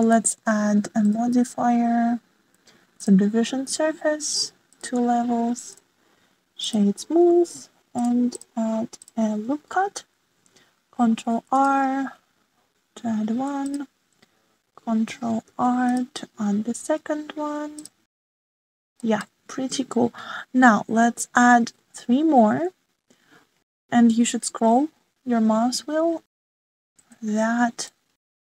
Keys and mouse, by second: 0.0 click, 1.0 shift+middle click, 2.0-4.0 drag, 5.7 click, 6.8 click, 8.9 click, 9.3 click, 11.7 ctrl+r, 16.4 ctrl+r, 20.0 shift+middle click, 22.5 ctrl+r.